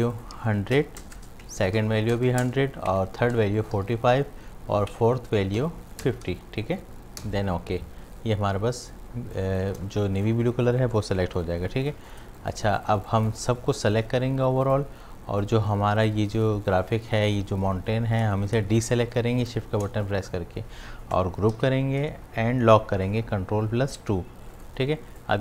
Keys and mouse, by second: 1.4 Tab, 4.9 Tab, 9.2 space, 9.3 click, 9.7 space, 11.8 click, 12.2 space, 12.4 click, 12.8 ctrl+alt+click, 13.2 ctrl+click, 13.8-17.2 drag, 18.5 shift+Num_Lock, 18.5 click, 21.5 ctrl+g, 24.0 ctrl+2, 24.6 click.